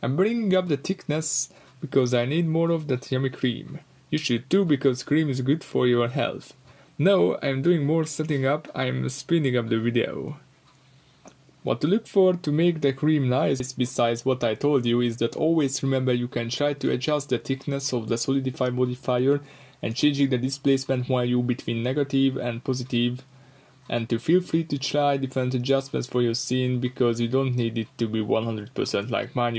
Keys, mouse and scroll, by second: 3.9-6.8 middle drag, 6.8-10.5 drag, 10.6-11.1 scroll down 2, 11.1-13.5 drag, 14.3 click, 14.4-14.9 scroll down 2, 15.1-20.2 drag, 16.6 Return, 17.5 Return, 20.8-22.8 drag, 22.5 Return, 22.8-26.4 middle drag, 23.8 scroll down 2, 24.5-25.1 scroll up 4, 26.4-27.4 drag, 27.4 scroll down 1, 28.5 click, 28.7 middle click, 28.9 scroll up 1, 29.3-29.5 drag.